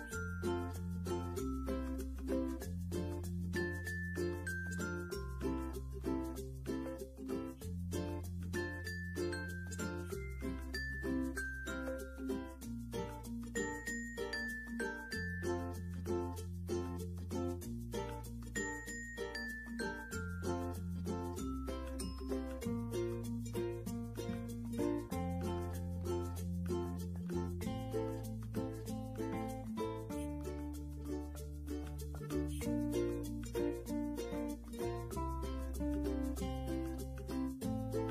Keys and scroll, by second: 20.9 ctrl+g, 24.4 ctrl+c, 25.5 ctrl+f.